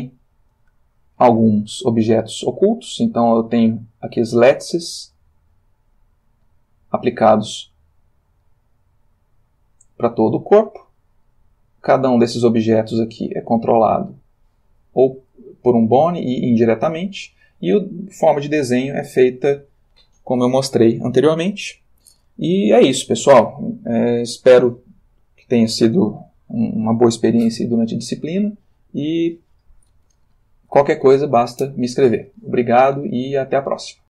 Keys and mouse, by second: 1.6 middle click, 2.7 middle click, 4.2 click, 5.0-6.8 drag, 7.0 click, 12.9 click, 13.7 r, 14.7 Escape, 15.9 click, 18.7-19.8 ctrl+middle drag.